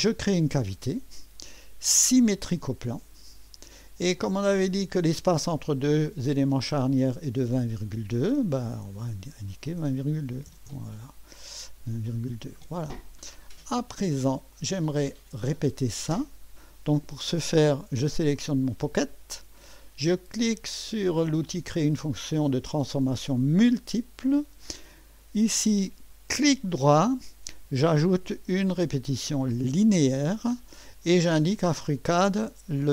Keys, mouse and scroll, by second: 2.8 click, 4.2 click, 8.2 click, 8.9 click, 10.1-11.4 typing, 11.8 Return, 14.6-15.1 drag, 18.2 click, 23.4 click, 26.4 right click, 29.7 click.